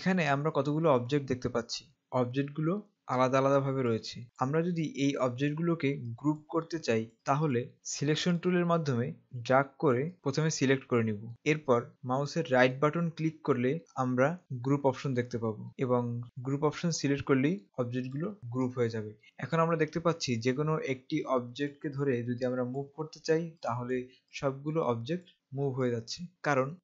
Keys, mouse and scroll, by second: 3.0 click, 4.2 click, 8.4 click, 12.6 right click, 17.1 click.